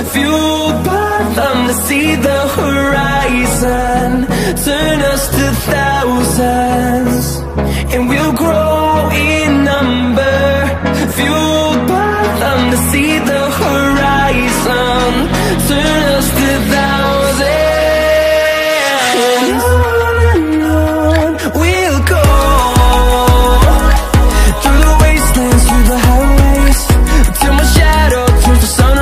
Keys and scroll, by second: 2.7 ctrl+space.